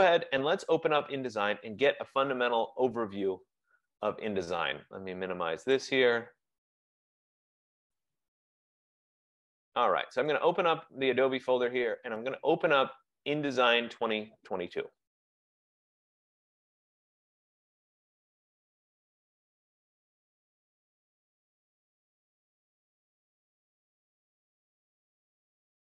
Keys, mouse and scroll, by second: 10.4 click, 10.6 click, 14.9 click, 15.1 click.